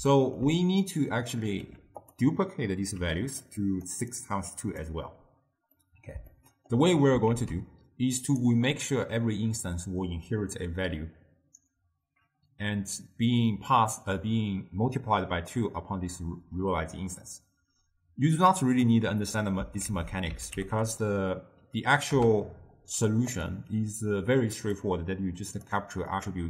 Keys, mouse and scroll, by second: 1.0-1.7 drag, 1.7 g, 3.1 d, 3.2 click, 3.6 d, 3.7 click, 4.0 d, 4.2-4.9 drag, 4.9 d, 5.9-7.4 middle drag, 7.4 ctrl+a, 20.0 ctrl+a, 20.8 t, 24.7-26.4 drag.